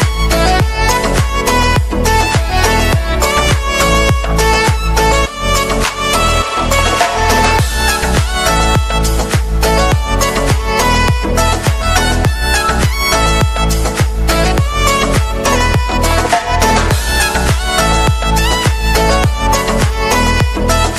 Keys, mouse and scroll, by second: 2.9 right click, 3.4 right click, 5.3 right click, 6.1 right click, 11.3 right click, 13.1 middle click, 13.4 right click, 19.7 right click.